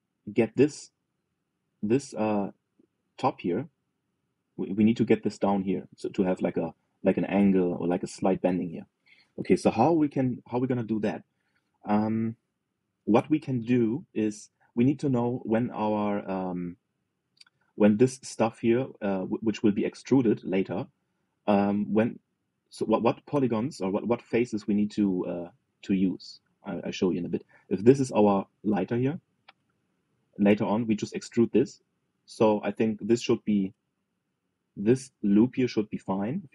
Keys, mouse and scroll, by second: 9.4 middle click, 10.3 KP_3, 12.2-14.7 shift+middle drag, 15.2-17.7 middle drag, 20.0-23.5 middle drag, 23.5 click, 24.0-25.1 middle drag, 25.1 click, 25.8 click, 26.2 shift+click, 26.5 shift+click, 26.7 shift+click, 27.1 shift+click, 27.4 shift+click, 27.7 shift+click, 28.0 shift+click, 28.4 shift+click, 28.6 shift+click, 29.0-31.1 middle drag, 31.1 e, 33.6 middle click, 34.5 ctrl+z, 34.8-36.5 middle drag.